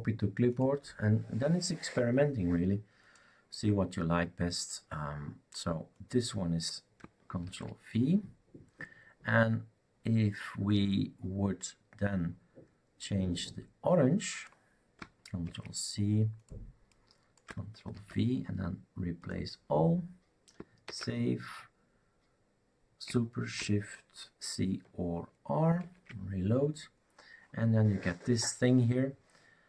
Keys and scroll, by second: 7.4 ctrl+v, 15.4 ctrl+c, 17.9 ctrl+v, 20.8 ctrl+s, 25.8 shift+r.